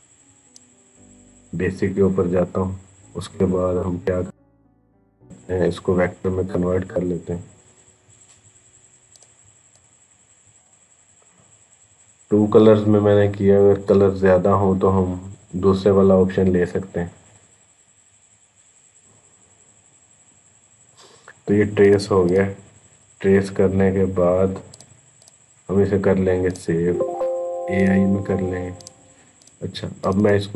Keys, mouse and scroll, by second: 0.3 click, 6.6 click, 22.4 click, 24.2 click.